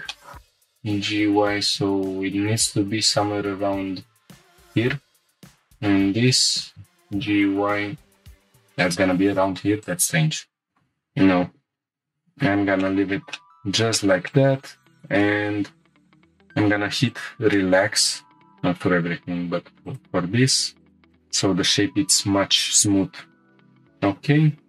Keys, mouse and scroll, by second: 0.1 shift+middle drag, 0.4 g, 0.4 y, 4.5 shift+click, 5.4 alt+click, 6.2 g, 7.0 y, 8.8-10.0 drag, 10.5 scroll down 2, 10.7 shift+middle click, 11.4 ctrl+z, 11.9 ctrl+z, 11.9 ctrl+z, 11.9 middle click, 11.9 scroll down 1, 12.8 shift+middle click, 13.2 Tab, 13.3-13.9 middle drag, 14.0 shift+middle click, 14.3 middle click, 14.6 Tab, 14.8-15.1 scroll up 3, 15.2 shift+middle click, 15.6 scroll down 1, 16.1 2, 17.1 alt+click, 17.5-18.3 middle drag, 18.5 ctrl+click, 19.8 shift+click, 20.9 shift+click, 20.9 middle click, 20.9 scroll up 1, 21.1 right click, 23.5-24.0 scroll down 2.